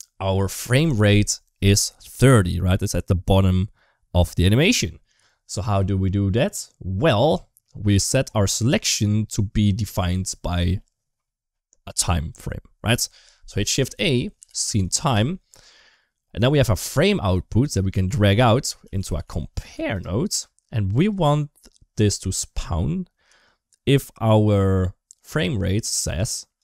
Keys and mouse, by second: 2.1 click, 7.4 middle click, 9.2 middle click, 13.7 shift+a, 17.3-20.9 drag, 26.4-26.6 drag.